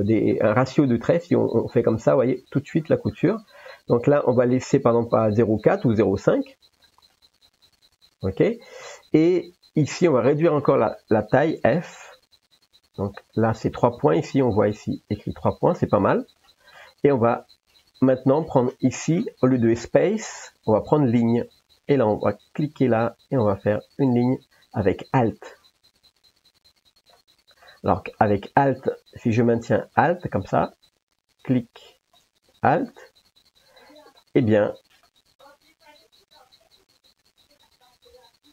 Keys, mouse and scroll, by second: 0.1 middle click, 1.0-2.2 drag, 5.6-6.9 drag, 7.5-8.3 drag, 11.9 f, 16.4 middle click, 19.1-21.6 drag, 24.3-27.2 drag, 27.6 middle click, 28.8-30.0 middle drag, 32.1-34.2 drag, 35.1 middle click, 37.8-38.5 drag.